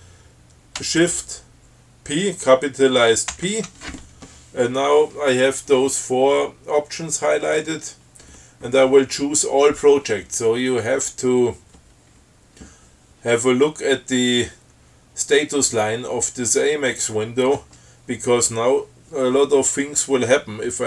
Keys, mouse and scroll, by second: 3.6 shift+p.